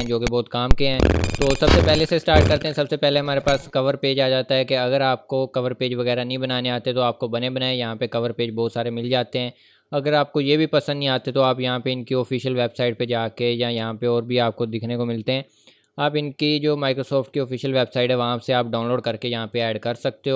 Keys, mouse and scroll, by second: 3.0 click, 5.8-7.1 scroll down 1, 8.2-9.0 scroll up 1, 9.0 scroll down 1, 9.8-11.2 scroll up 1, 11.2 click, 12.4-14.2 scroll down 1.